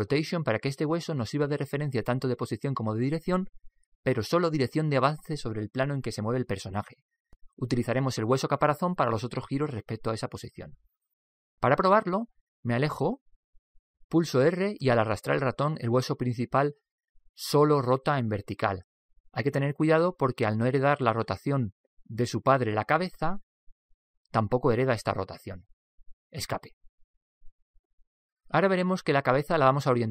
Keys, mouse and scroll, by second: 13.0-15.6 middle drag, 14.8 Escape, 14.8 r, 16.3 r, 28.1-30.1 middle drag.